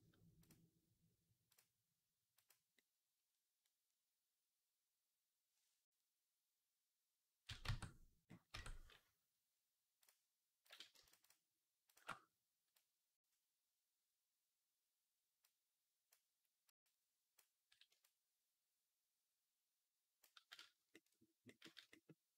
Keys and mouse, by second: 0.3-2.4 drag, 2.4-9.8 middle drag, 7.5 Tab, 8.4 Tab, 9.8 click, 10.5 shift+middle click, 11.1 alt+shift+click, 11.4 alt+shift+middle click, 11.7 alt+shift+click, 11.8 alt+shift+middle click, 12.7-22.3 drag.